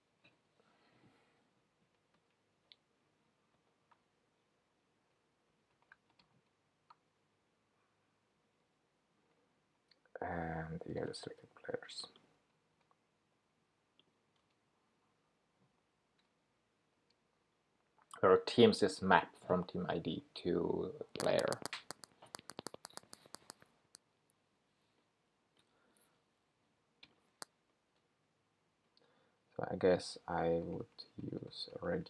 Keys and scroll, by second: 12.8 super+c, 15.7 super+v.